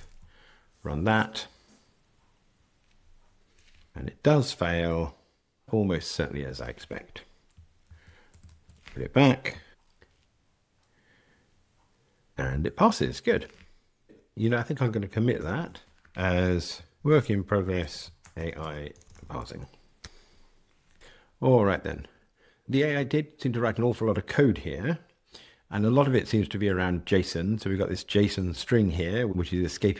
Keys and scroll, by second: 7.8 super+z, 8.4 super+z, 9.7 ctrl+r, 15.4 super+k, 20.0 Escape, 28.3 super+b.